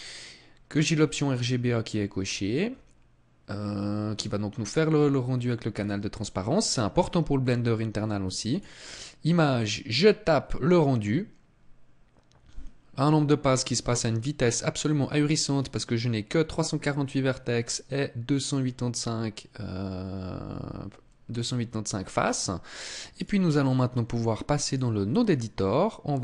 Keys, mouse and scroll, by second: 0.9-3.4 scroll up 10, 3.4 scroll down 1, 3.6 scroll down 1, 4.2-4.6 scroll down 2, 4.8-5.8 scroll up 6, 7.6 click.